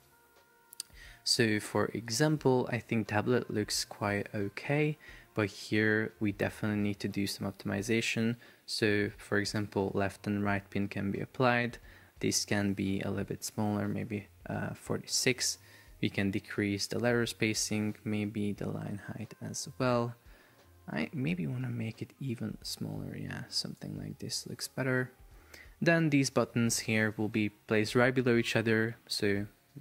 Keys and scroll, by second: 9.8 Return, 14.0 Return.